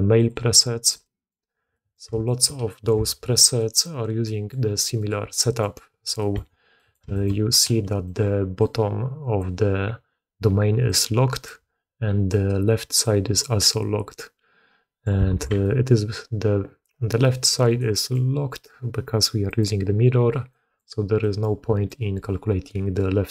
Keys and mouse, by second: 0.1-1.2 drag, 1.6 middle drag, 2.1 shift+middle drag, 2.6 middle click, 3.0 alt+a, 3.5 drag, 4.1 drag, 4.9 click, 5.2-5.5 drag, 6.1 click, 6.7 click, 7.0 shift+click, 7.8 click, 8.1 d, 8.4 d, 8.5 click, 8.5-9.5 d, 10.6 d, 10.8 click, 11.4 d, 11.5 d, 12.0 d, 12.2-13.6 drag, 13.6 d, 15.1 d, 15.3 alt+a, 15.4 d, 15.5-17.1 drag, 17.1 d, 17.6 click, 17.9 click, 19.5 click, 20.4 click, 21.1 click, 21.6 d, 21.8-23.3 drag.